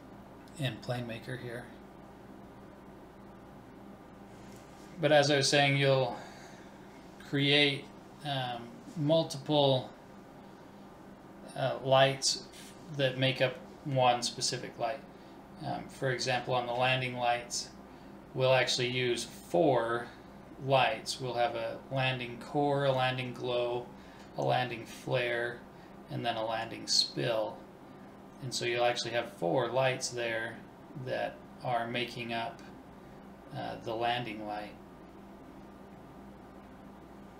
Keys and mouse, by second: 25.6-27.6 middle drag, 29.1-31.1 right drag, 30.7-32.3 drag.